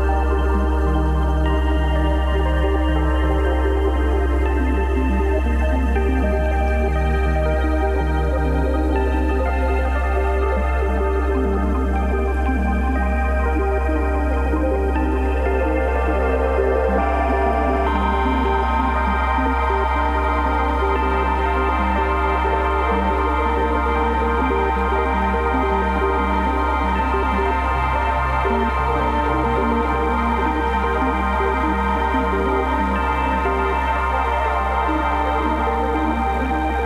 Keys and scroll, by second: 0.2 Delete, 5.1 b, 5.6 0, 6.8 [, 8.1-11.1 typing, 12.3 x, 13.4 5, 15.2 x, 16.8-22.5 typing, 24.1 [, 25.6 x, 25.9 [, 26.6 0, 28.6 [, 29.3 ], 33.5 x, 35.0-36.2 typing.